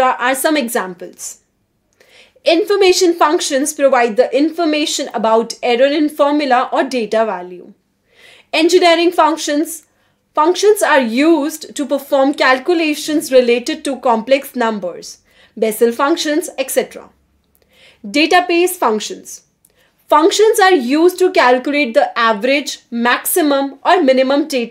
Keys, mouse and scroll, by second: 0.8 0, 1.4 Return, 5.6-8.6 typing, 11.8 3, 15.0 BackSpace, 18.4-24.7 typing.